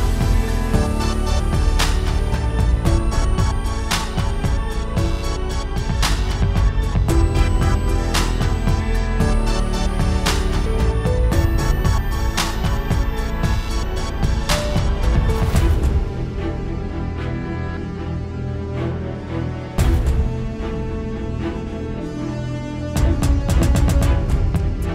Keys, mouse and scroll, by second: 0.2 scroll up 1, 0.4 click, 0.5 right click, 1.2 alt+a, 1.3 scroll down 2, 1.4 shift+middle click, 1.6 scroll up 1, 1.7 middle click, 1.8 click, 1.9 middle click, 2.2 click, 3.9 click, 5.6 scroll down 1, 5.8 click, 8.5 click, 9.9 alt+a, 10.0 scroll down 2, 10.2 shift+middle click, 10.3 scroll up 2, 10.4 middle click, 10.7 scroll down 1, 10.8 shift+middle click, 10.9 scroll up 1, 11.0 middle click, 11.3 click, 11.6 KP_Decimal, 11.7 scroll up 4, 11.9 middle click, 12.4 right click, 12.8 scroll down 1, 12.9 alt+a, 13.1 scroll up 1, 13.3 middle click, 13.6 click, 13.8-14.1 scroll down 1, 14.7 scroll down 1, 14.9 s, 17.5 alt+a, 17.6-18.1 scroll down 2, 17.7 shift+middle click, 18.1 shift+middle click, 18.3 middle click, 19.9-20.4 scroll up 2, 20.0 click, 20.4 s, 22.1 ctrl+z, 22.2 scroll down 2, 22.3-22.7 scroll up 2, 22.8 alt+a, 22.9-23.2 scroll down 1, 23.2 click.